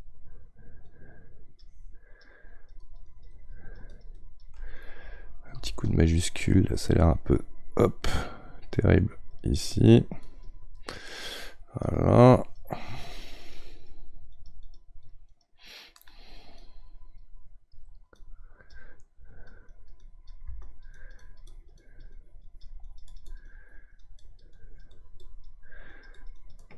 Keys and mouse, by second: 1.0-2.5 right drag, 2.5-16.7 drag, 16.7-19.7 right drag, 19.7-26.7 drag.